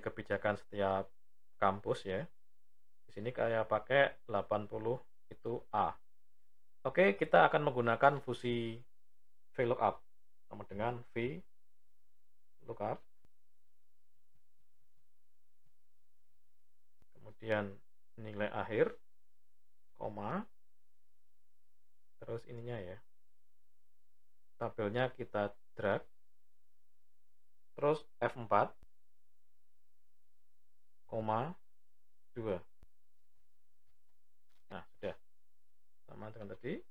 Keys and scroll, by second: 10.4 typing, 28.1 F4.